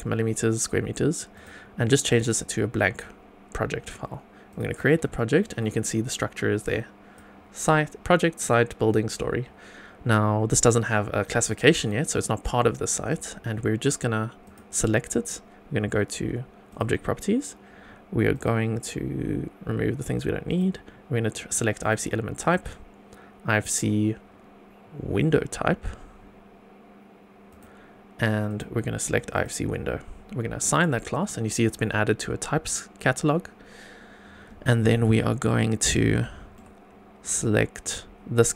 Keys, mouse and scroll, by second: 1.3-2.2 drag, 4.4 click, 5.1 shift+middle click, 6.6 click, 14.4 click, 16.7 click, 18.3 click, 20.4-21.9 drag, 22.3-27.6 drag, 28.4-29.4 drag, 30.6 click, 35.1 scroll down 1, 35.5 middle click, 36.2 shift+middle click, 38.4 click.